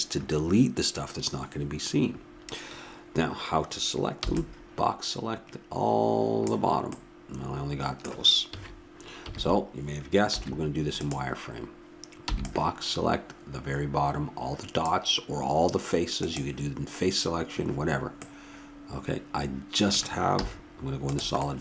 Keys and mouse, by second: 4.2 b, 8.5 a, 9.2 KP_1, 10.4 z, 12.3 b, 16.2-18.0 drag, 18.2-20.4 middle drag, 20.4 z.